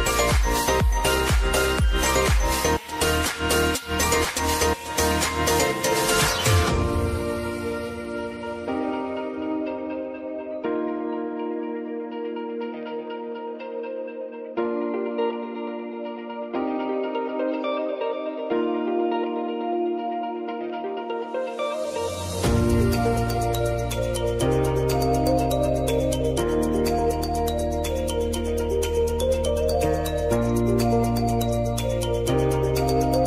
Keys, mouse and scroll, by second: 2.5-17.3 drag, 17.7-18.5 typing, 19.8 click, 21.2 shift+click, 22.7 ctrl+shift+c, 24.7-26.5 typing, 27.3 Return, 29.0 F4, 30.0 click, 31.6 ctrl+0, 32.9 click.